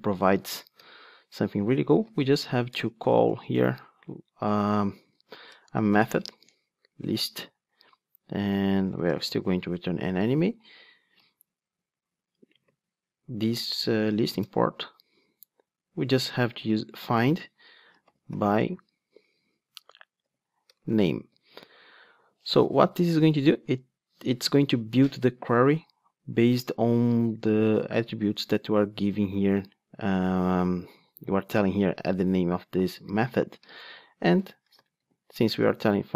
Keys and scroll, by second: 0.3 Tab, 9.8 Return, 14.4 alt+Return, 22.4 Return.